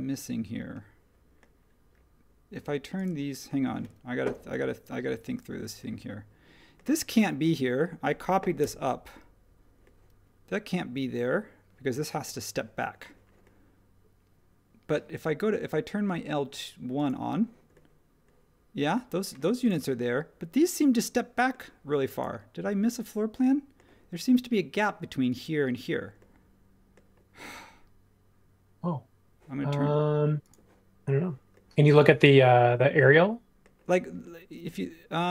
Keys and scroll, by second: 8.6 BackSpace.